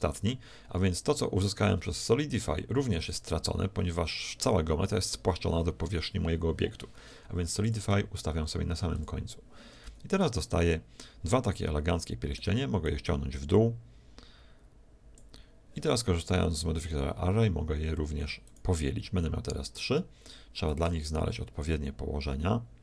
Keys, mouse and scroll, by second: 3.0-4.9 drag, 7.6-10.8 drag, 9.8 z, 10.4-12.4 middle drag, 12.8-14.6 drag, 16.8-20.2 drag, 20.7-22.4 drag.